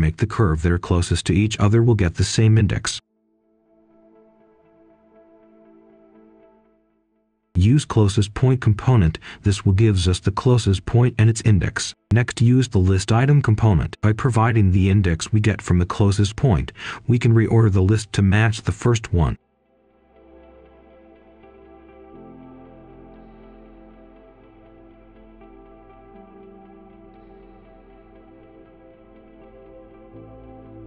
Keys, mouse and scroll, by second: 0.3 click, 1.2-4.4 typing, 5.8 Return, 6.8-10.8 drag, 11.4-13.3 typing, 13.9 click, 13.9 ctrl+z, 14.1-20.1 drag, 20.7 middle click, 21.2 click, 22.1 ctrl+right click, 23.6 shift+right click, 24.1-25.0 scroll up 1, 25.0 click, 25.2-25.8 scroll up 1, 25.8-27.3 drag, 27.3-27.9 scroll down 1, 27.9-29.1 scroll up 1, 29.1-29.6 scroll down 1, 29.6 right click.